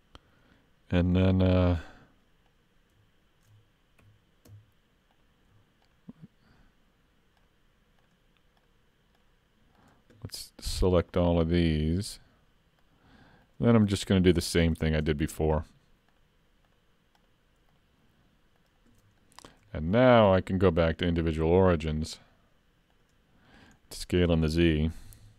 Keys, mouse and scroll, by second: 2.5 alt+click, 4.0 3, 5.1 alt+click, 5.9 alt+shift+click, 14.2 shift+middle click, 15.6 alt+shift+click, 19.2 middle click, 19.7 shift+middle click, 20.2-21.6 scroll down 1, 21.6 scroll down 2, 21.9 click, 23.5 middle click, 23.9-24.9 scroll up 2, 25.0 s.